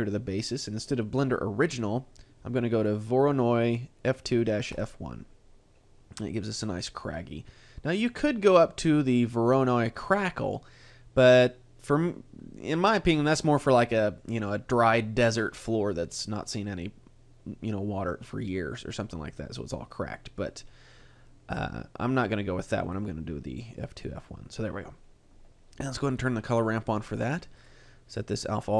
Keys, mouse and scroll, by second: 1.7 click, 8.0 click, 22.8 click, 26.2 click, 27.6 click.